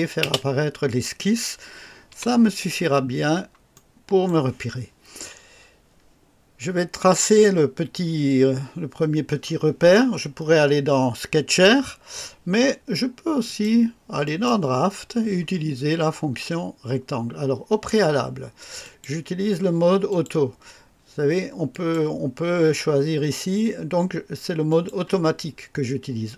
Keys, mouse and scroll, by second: 0.2 space, 2.1 typing, 2.8-3.2 scroll down 2, 3.7-4.4 right drag, 13.4 click, 14.2 click, 18.8 click, 20.1 click, 21.7 click, 24.7 click.